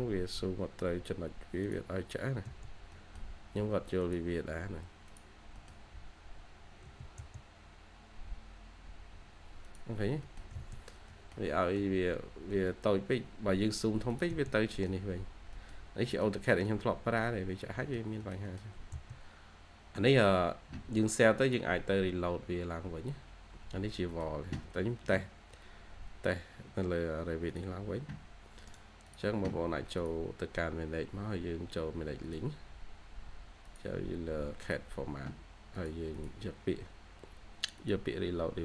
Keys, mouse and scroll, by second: 2.3 space, 2.5 scroll down 1, 2.8 middle click, 3.4-4.5 scroll up 1, 4.7-5.4 scroll down 1, 5.4 middle click, 5.9-6.3 scroll up 1, 6.7 h, 7.3 scroll up 1, 8.0 h, 9.9 scroll down 1, 10.1 middle click, 10.4 scroll up 1, 11.0 middle click, 12.0-12.4 scroll up 1, 12.7-13.4 scroll up 1, 13.4-14.2 scroll down 1, 14.2 space, 14.3 scroll down 1, 14.6 middle click, 16.3 scroll down 1, 16.4 middle click, 17.0-17.4 scroll up 1, 17.4 scroll down 1, 17.6 scroll up 1, 17.7 middle click, 18.5 scroll down 1, 18.6 2, 22.9 scroll up 1, 23.7 scroll down 1, 24.0 middle click, 24.5-25.5 scroll up 1, 28.6 right click, 36.0 double click.